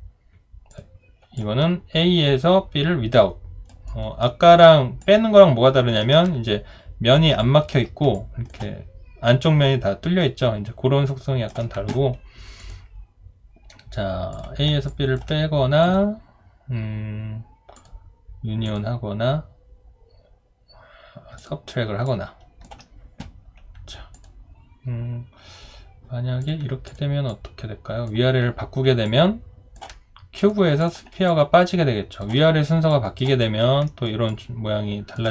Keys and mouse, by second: 1.4 alt+click, 3.9 alt+right click, 4.3 alt+middle click, 5.0 alt+click, 7.7 alt+click, 8.1 alt+click, 9.4 alt+click, 14.9 alt+click, 22.1 alt+click, 29.0 alt+click, 31.3 alt+click, 32.9 alt+click, 33.4 alt+right click, 33.9 alt+middle click, 34.3 alt+click.